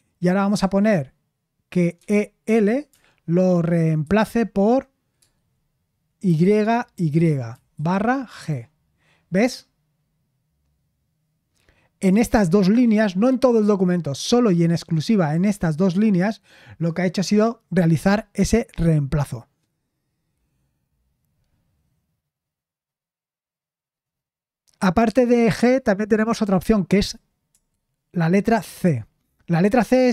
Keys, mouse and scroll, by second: 1.7-2.9 typing, 4.0 typing, 6.2-8.3 typing, 20.1-22.8 scroll down 1, 22.8-23.8 scroll down 1, 23.8-24.4 scroll down 1, 24.4-27.5 scroll down 1, 27.5 BackSpace, 28.6 c, 29.9 Return.